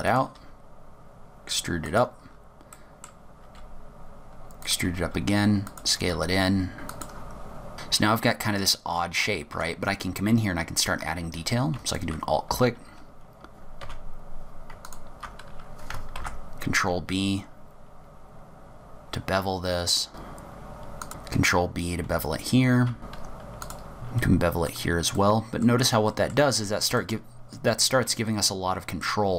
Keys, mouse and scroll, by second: 0.5 e, 2.4-2.8 scroll down 5, 2.8 middle click, 3.6 e, 4.9 s, 6.1-7.4 typing, 6.8 scroll down 4, 7.6 middle click, 7.7 Tab, 8.7-9.6 scroll up 6, 9.6 Tab, 10.2 scroll down 1, 12.0 alt+click, 13.9 2, 14.9 alt+click, 16.3 ctrl+b, 20.3 z, 20.4 alt+click, 20.5 alt+click, 20.7 click, 20.7 ctrl+b, 21.1 scroll down 1, 21.4 scroll up 1, 22.2 z, 23.0 click, 23.1 alt+click, 23.2 ctrl+b, 23.5 scroll down 1, 23.5 click, 23.6 middle click, 23.7 alt+click, 23.7 middle click, 23.8 ctrl+b, 24.8 click, 25.3 middle click, 25.7-26.4 scroll down 5, 26.2 middle click, 26.5 Tab, 27.1 middle click.